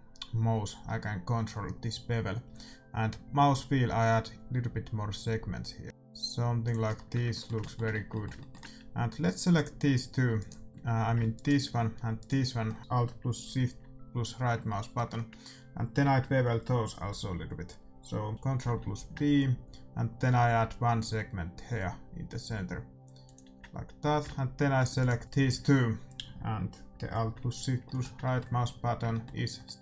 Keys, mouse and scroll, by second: 6.9-10.3 middle drag, 7.2 Tab, 7.9 Tab, 9.5-11.4 drag, 10.7-12.8 right drag, 10.7 a, 12.5 middle click, 14.6-17.3 middle drag, 18.5 ctrl+b, 23.6-24.9 middle drag, 23.9 a, 24.9-26.8 right drag, 27.8-29.8 middle drag.